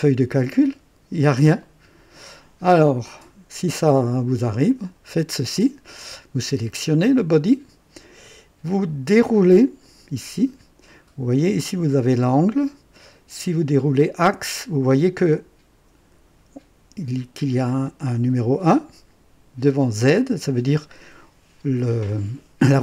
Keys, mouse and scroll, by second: 4.6 click, 6.4 click, 9.6 click, 13.0 click.